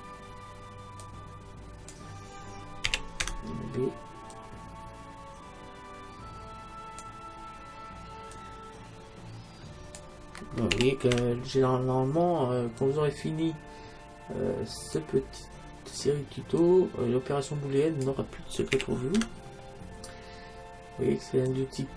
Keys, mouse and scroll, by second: 1.1-2.7 drag, 3.0 a, 3.2 b, 8.4-10.2 drag, 10.8 a, 11.2 b, 16.6-18.5 drag, 18.8 a, 19.2 b.